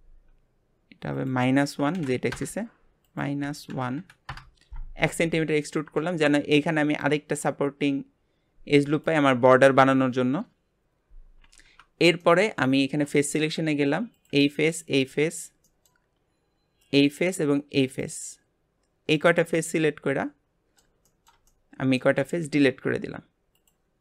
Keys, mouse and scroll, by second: 1.1-5.7 drag, 5.7-11.9 middle drag, 12.2-14.1 middle drag, 14.1 click, 14.7 shift+click, 15.1-16.8 middle drag, 16.8 shift+click, 17.8 shift+click, 19.1 shift+click, 19.5-22.2 middle drag, 22.2 x.